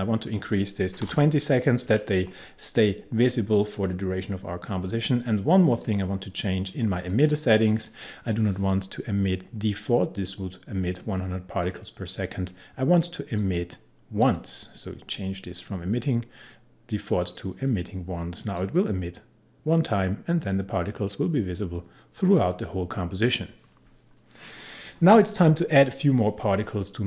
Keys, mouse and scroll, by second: 0.8-1.6 typing, 5.8 click, 13.4 click, 18.6-25.9 drag.